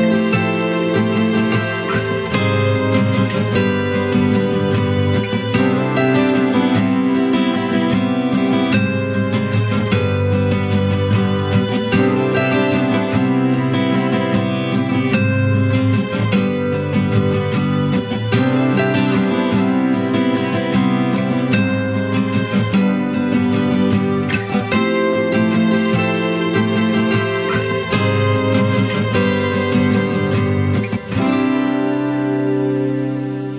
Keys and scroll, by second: 20.2 f, 20.6 f.